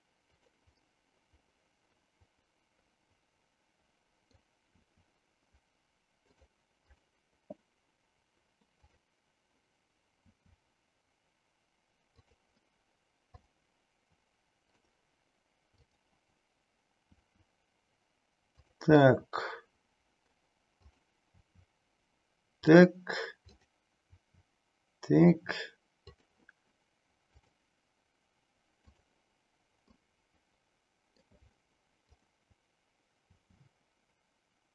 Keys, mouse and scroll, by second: 0.4 click, 0.8-4.5 middle drag, 4.8 r, 6.3 click, 10.3 r, 12.3 click, 13.6-14.8 middle drag, 15.8 click, 17.0 r, 18.5 drag, 19.0-20.3 middle drag, 20.8 click, 21.5 r, 22.8 click, 23.5 click, 24.3 r, 26.2 click, 27.5 click, 29.4 click, 30.4 middle click, 32.1 click, 33.5 r.